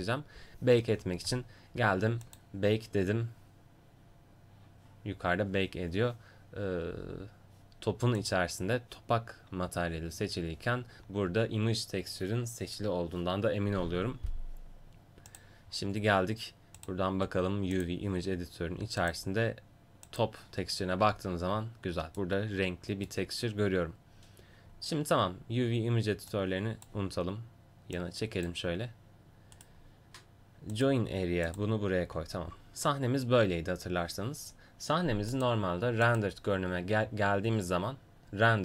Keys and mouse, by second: 28.1 click, 30.8 right click, 32.1-34.5 middle drag, 35.3-38.4 drag.